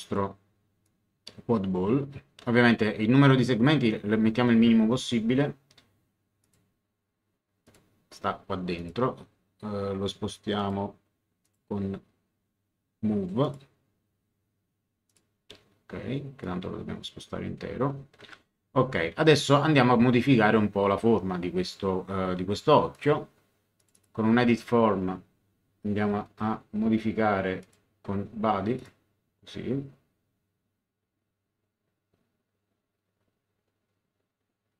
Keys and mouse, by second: 0.8 click, 6.4 click, 7.6 click, 8.7 click, 10.5 click, 13.4 click, 15.1 click, 16.4 click, 18.2 Return, 22.9 click, 27.6 click, 28.7 click.